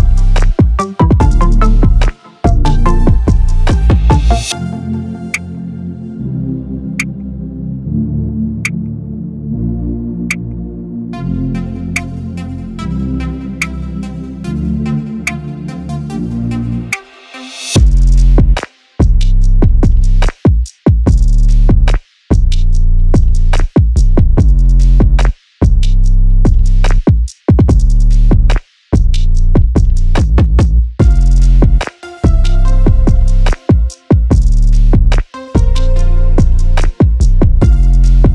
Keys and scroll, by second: 20.8 Right.